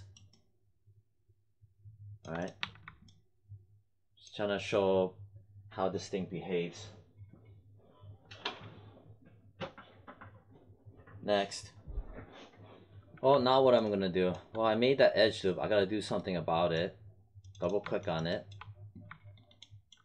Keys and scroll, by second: 2.6 1.